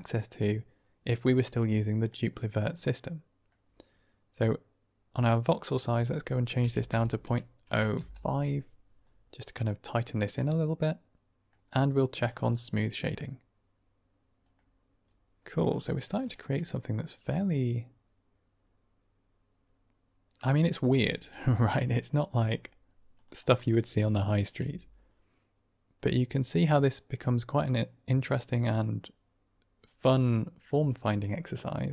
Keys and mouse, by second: 2.0-3.4 middle drag, 5.7-9.7 drag, 10.3-11.4 middle drag, 14.5-15.7 middle drag, 15.8 middle drag, 16.3 shift+middle drag, 16.5-20.5 middle drag, 21.1 middle drag, 21.4 shift+middle drag, 23.5-24.1 middle drag, 24.5 r.